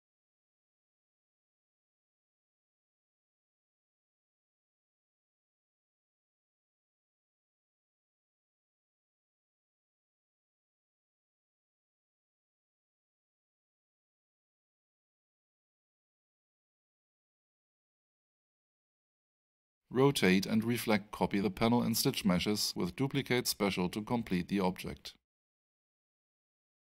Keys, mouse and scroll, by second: 2.3 click, 4.6-5.0 scroll down 1, 5.7 alt+scroll down 1, 5.8 alt+click, 6.9 middle click, 8.5 click, 12.9 click, 16.6 w, 18.5 click, 23.1 click, 24.4-25.3 typing, 25.7 Tab.